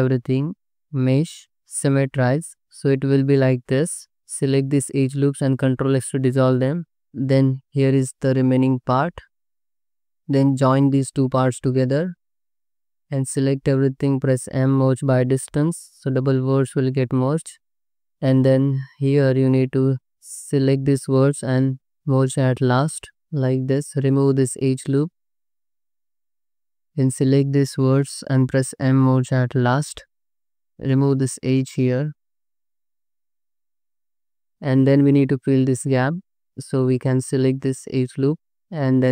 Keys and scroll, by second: 4.1 2, 5.5 ctrl+x, 6.3 Tab, 7.3 /, 9.7 Tab, 12.9 Tab, 13.4 a, 14.7 m, 18.9 1, 20.1 alt+z, 21.8 m, 22.9 alt+z, 23.8 2, 25.6 ctrl+x, 26.5 1, 29.0 m, 30.3 2, 31.3 1, 31.7 2, 32.2 ctrl+x, 33.2 ctrl+x, 35.4 2, 36.8 2.